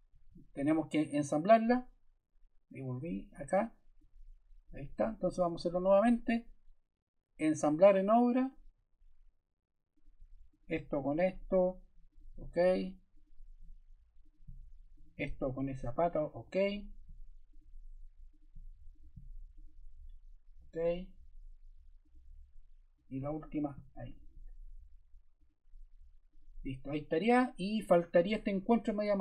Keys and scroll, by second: 5.2 super+Caps_Lock, 5.4 super+z.